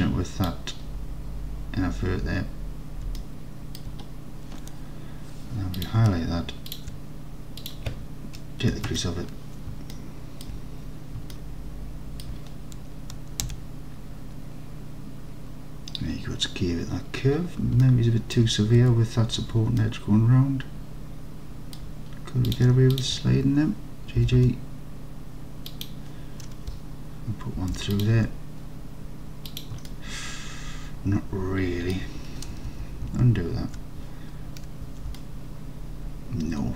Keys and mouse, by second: 3.2-3.8 alt+middle drag, 7.9-9.6 drag, 10.0 alt+click, 11.3 alt+click, 13.5 Tab, 17.9-18.4 alt+drag, 18.9 Tab, 19.9-21.8 alt+drag, 24.3 g, 24.5 g, 25.7 click, 27.7 ctrl+r, 29.5 click, 29.9-32.0 alt+drag, 32.7 ctrl+z, 33.1 ctrl+z, 35.2-36.7 alt+drag.